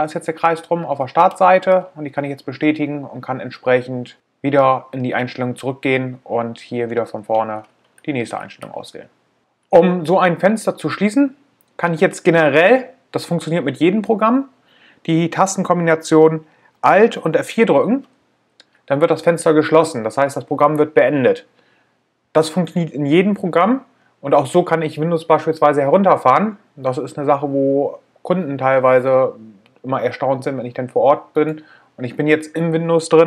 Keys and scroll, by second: 16.4 alt+F4.